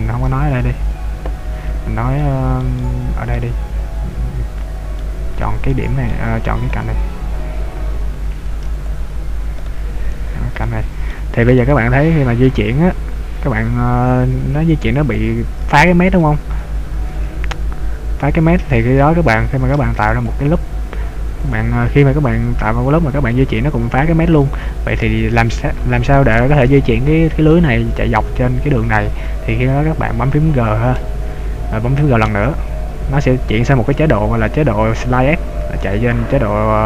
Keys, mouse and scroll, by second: 0.3 ctrl+z, 1.0 ctrl+z, 2.3 middle click, 2.8 shift+middle click, 3.9-4.2 scroll up 1, 5.0 middle click, 5.7 middle click, 6.8 right click, 8.9 shift+click, 9.7 right click, 10.7 shift+right click, 11.1 middle click, 12.2 click, 16.7 ctrl+d, 18.9 a, 19.7 ctrl+r, 21.6 click, 22.6 click, 25.1 ctrl+z, 31.0 g.